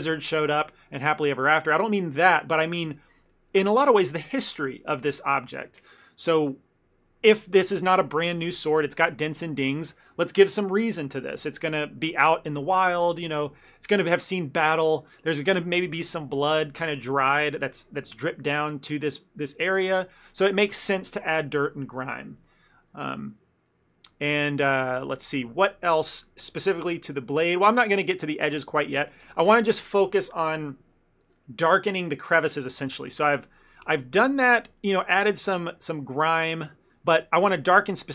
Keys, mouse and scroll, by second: 17.8 click, 18.2 click, 19.0 click, 19.1 click, 19.5 ctrl+middle click, 19.7 ctrl+middle click, 23.0 ctrl+middle click, 23.0 ctrl+middle click, 23.5 ctrl+middle click, 23.8 ctrl+middle click, 24.0 ctrl+middle click, 24.4 ctrl+middle click, 24.8 f, 25.2 ctrl+middle click, 26.0 ctrl+middle click, 26.5 ctrl+middle click, 26.9 ctrl+middle click, 27.5 shift+middle click, 32.9 ctrl+middle click, 33.2 middle click, 33.6 middle click, 33.7 ctrl+middle click, 33.8 shift+middle click, 34.0 shift+middle click, 34.1 ctrl+middle click, 34.4 middle click, 34.8 ctrl+middle click, 35.6 ctrl+middle click, 36.0 middle click, 36.6 shift+middle click, 36.8 ctrl+middle click, 37.1 middle click, 37.8 middle click.